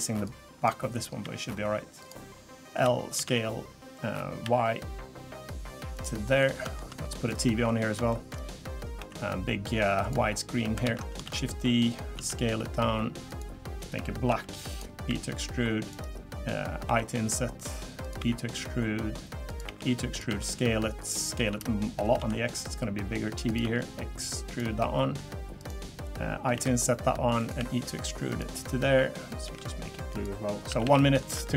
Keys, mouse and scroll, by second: 0.2 click, 1.2 e, 2.7 l, 3.1 s, 6.2 middle click, 7.0 middle click, 7.3 click, 7.7 middle click, 8.1 shift+middle click, 9.0 i, 10.8 ctrl+z, 11.2 shift+d, 12.1 s, 14.3 g, 15.1 e, 16.9 i, 18.2 e, 19.6 e, 20.3 s, 21.3 s, 23.6 e, 24.8 middle click, 25.6 click, 26.5 i, 27.6 e, 29.4 g, 30.5 scroll down 2, 30.7 a, 30.8 a, 30.9 middle click, 31.4 shift+middle click.